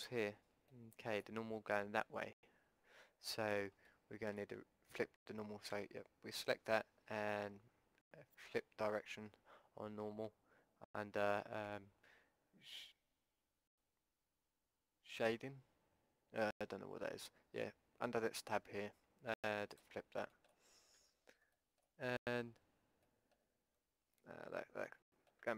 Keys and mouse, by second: 5.7 a, 19.7 click, 20.3-21.4 middle drag, 21.0 a, 21.4-23.0 drag, 21.7 middle click, 23.2 middle click, 24.2 Tab.